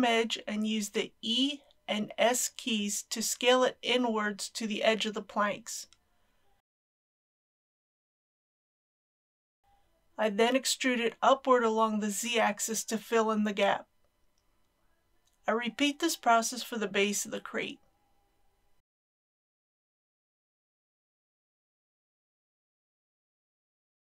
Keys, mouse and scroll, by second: 0.1 alt+click, 0.5 click, 1.5 KP_7, 3.4 e, 4.1 s, 6.8 click, 7.1 middle click, 8.0 shift+middle click, 8.4 middle click, 10.3 e, 10.7 z, 12.6 click, 14.4 Tab, 15.4 click, 17.3 Tab, 18.0 middle click, 19.7 alt+click, 20.3 KP_7, 21.2 e, 21.5 s, 23.6 click, 24.0 middle click.